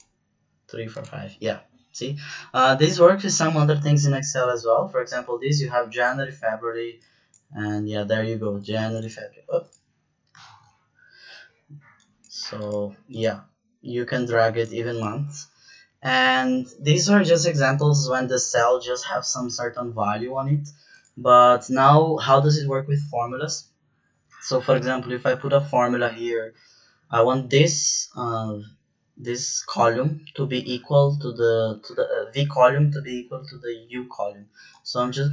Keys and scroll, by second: 10.4 ctrl+z, 24.7 =.